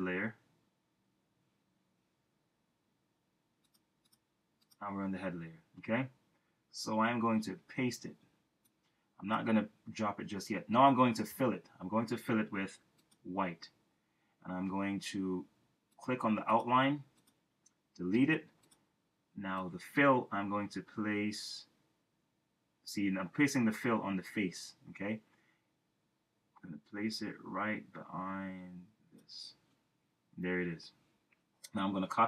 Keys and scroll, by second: 7.3 super+v, 11.2 k.